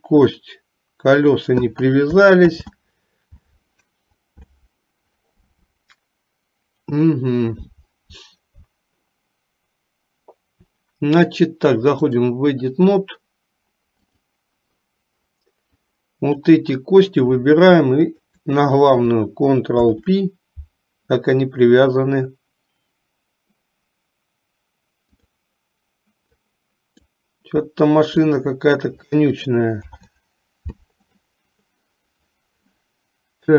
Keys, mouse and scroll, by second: 2.6 ctrl+z, 12.1-14.5 drag, 16.1 click, 18.1 shift+click, 20.0 ctrl+p, 26.4 click, 28.4 shift+click, 29.9 ctrl+p.